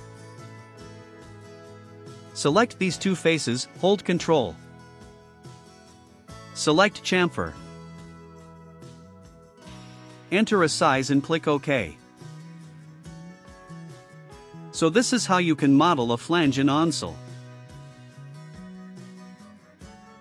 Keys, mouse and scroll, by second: 0.6 click, 3.0 click, 4.2 ctrl+click, 8.3 click, 11.2 click, 13.1 click, 14.5 click, 15.3-20.2 drag.